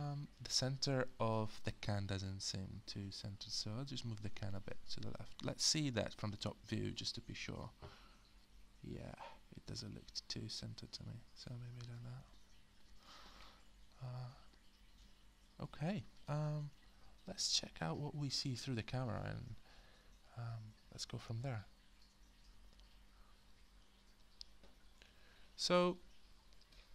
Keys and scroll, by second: 5.3-6.4 space, 12.2 space, 12.9 space, 21.0 alt+space, 22.5 space.